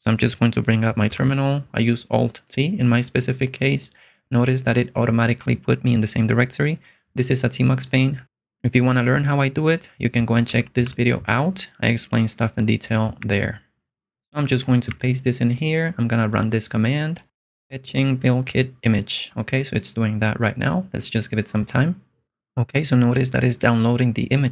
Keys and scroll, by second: 1.3 alt+t, 10.3 Left, 10.8 Up, 11.3 Return, 13.2 Escape, 14.9 super+v, 16.4 Return.